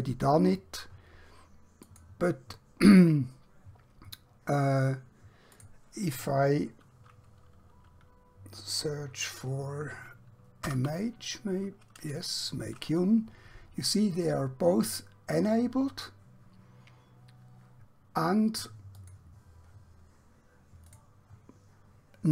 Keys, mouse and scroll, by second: 1.9 click, 10.6 typing, 19.0 click.